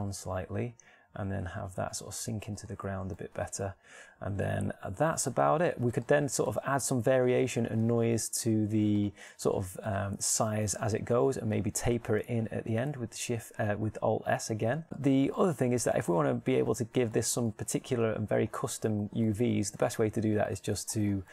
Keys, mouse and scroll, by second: 0.2-1.5 middle drag, 0.7 g, 3.4 click, 3.9-5.4 middle drag, 6.3 middle click, 7.6-9.2 drag, 9.2 alt+s, 10.3-11.6 drag, 12.4-13.8 middle drag, 13.8 alt+s, 16.2 Tab.